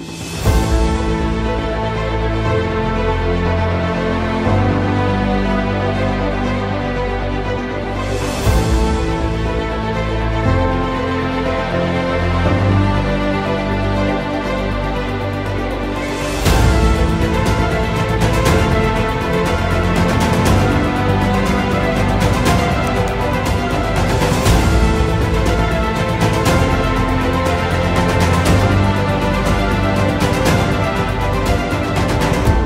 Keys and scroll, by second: 0.6 shift+F2, 1.0 F3, 2.0 r, 7.5 Escape, 8.5 F2, 10.4 Escape, 12.2 space, 13.4 c, 13.9 Escape, 14.6 F2, 15.2 Escape.